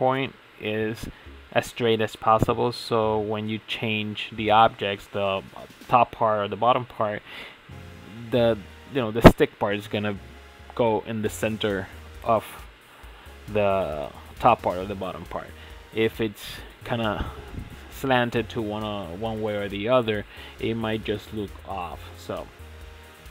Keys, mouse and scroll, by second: 0.3 alt+click, 0.4-0.8 scroll down 3, 0.5 shift+middle click, 0.8 shift+middle click, 1.1-1.5 scroll up 5, 1.5 alt+shift+click, 1.7-2.1 middle drag, 2.1 ctrl+z, 2.2 alt+shift+click, 2.5 shift+middle click, 3.0 alt+shift+click, 3.1-4.0 shift+middle drag, 4.0 alt+shift+click, 4.1 middle click, 4.7 alt+shift+click, 5.1 middle click, 5.2 ctrl+z, 5.3 scroll up 4, 5.4 shift+middle click, 5.6 alt+shift+click, 5.8 ctrl+z, 6.2 middle click, 6.3 ctrl+z, 6.5 alt+shift+click, 6.7 middle click, 7.1 ctrl+e, 7.7 scroll down 3, 7.8 Tab, 8.0 shift+middle click, 8.2 Tab, 8.3-9.3 middle drag, 9.3 scroll up 1, 9.4 middle click, 9.7 alt+shift+click, 10.2 middle click, 10.4 alt+shift+click, 10.8 ctrl+z, 10.9 alt+shift+click, 11.3 shift+middle click, 12.1 KP_Divide, 12.3 shift+middle click, 12.5 KP_Decimal, 12.7 scroll down 3, 12.8 middle click, 13.1 alt+shift+click, 13.4 alt+shift+click, 13.6 alt+shift+click, 13.9-14.9 middle drag, 15.4-16.2 middle drag, 16.2 x, 17.2-18.3 middle drag, 18.3 alt+click, 18.5 middle click, 18.7 s, 19.3 middle click, 19.5 g, 20.2 alt+drag, 20.3-20.8 middle drag, 20.8 e, 21.6 g, 22.3 Tab, 22.5 Tab, 22.8 Tab, 22.9-23.2 scroll down 1, 23.2 Tab.